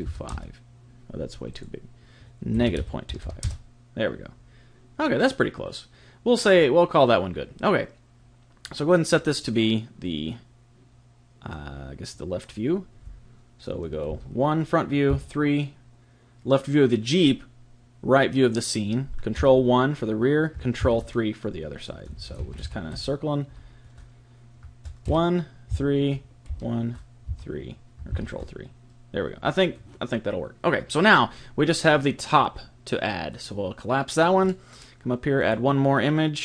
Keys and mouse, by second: 1.5 click, 9.1 click, 14.1 KP_1, 15.1 KP_3, 25.1 KP_1, 25.7 KP_3, 27.3 KP_3, 29.5 KP_1, 33.3 click, 35.1 middle click, 35.4 click.